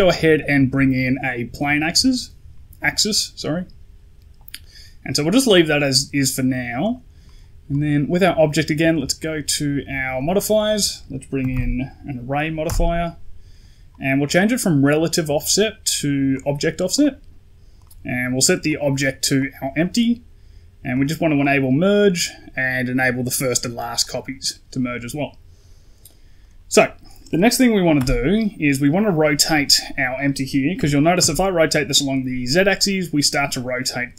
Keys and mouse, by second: 6.7 right click, 9.0 click, 10.2-12.5 drag, 14.8 click, 16.2 click, 16.8 click, 17.6 click, 18.6 click, 20.8 click, 21.3 click, 23.9 click, 26.2 right click, 26.3 right click, 27.8 n, 30.7 r.